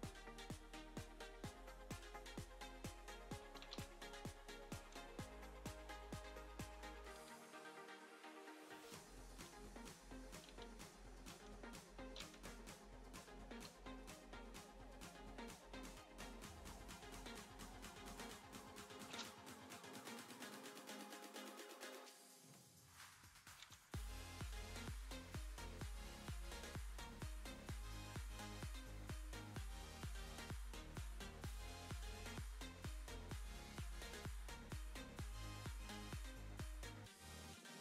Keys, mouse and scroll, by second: 3.2 click, 4.1 BackSpace, 5.3 Tab, 7.5 s, 16.5 click, 17.2-17.5 scroll down 4, 24.7 click, 26.0 click, 28.1 g, 30.9 middle click, 33.2 g, 35.0 middle click, 36.7 click.